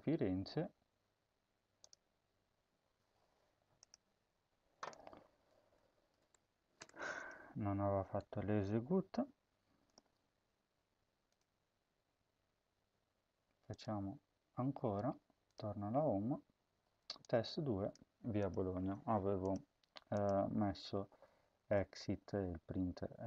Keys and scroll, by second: 6.1 BackSpace, 6.6 BackSpace, 7.9 ctrl+s, 21.0 ctrl+z, 21.5 ctrl+z.